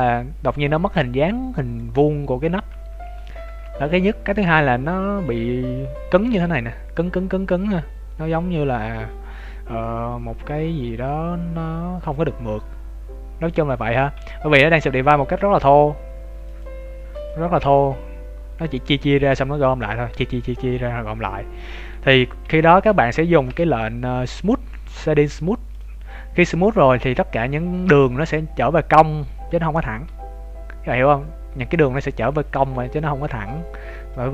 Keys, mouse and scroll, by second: 2.4 scroll down 1, 3.2 shift+middle click, 3.2-3.6 scroll down 2, 3.6-4.0 scroll up 2, 4.0 middle click, 13.5-13.8 scroll up 1, 13.8 shift+middle click, 14.1 Tab, 16.4 click, 17.1 click, 17.5 Tab, 21.6-22.3 scroll down 3, 22.3 Tab, 22.8 Tab, 23.5 t, 25.7 click, 27.6 scroll up 2.